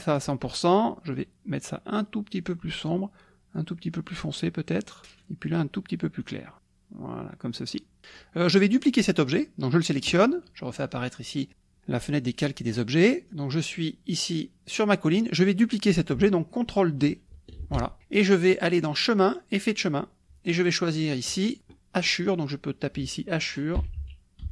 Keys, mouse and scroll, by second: 1.1-3.0 drag, 3.6-5.0 drag, 6.2 click, 6.6-8.4 drag, 9.2 click, 10.8 click, 17.6 ctrl+d, 19.0 click, 21.3 click, 22.2 click, 23.8 h, 24.0 a, 24.4 c.